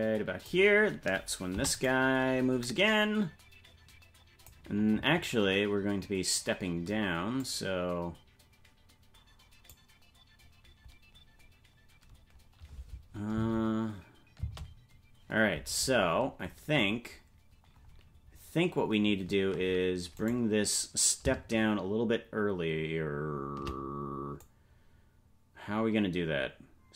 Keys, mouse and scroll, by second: 1.5 i, 2.6-4.5 drag, 7.4-9.8 drag, 13.3 space, 15.9 right click, 15.9 space, 24.4-26.9 drag.